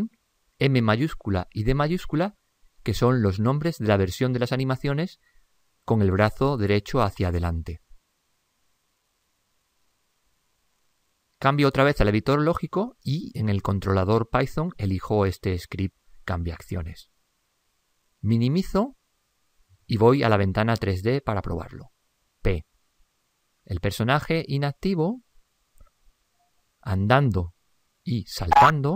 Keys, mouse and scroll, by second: 18.7 ctrl+Up, 22.5 p.